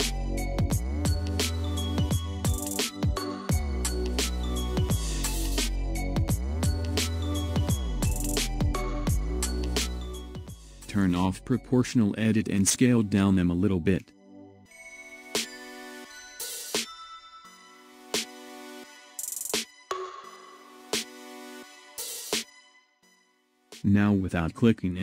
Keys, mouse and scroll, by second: 1.7-7.1 shift+middle drag, 7.8 s, 11.5 click, 13.8 s.